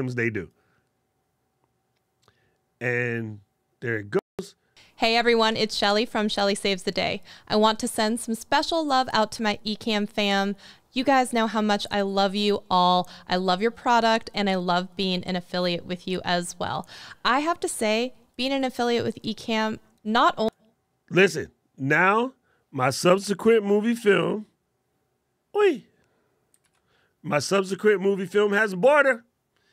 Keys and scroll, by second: 23.7 alt+super+`, 26.3 super+`.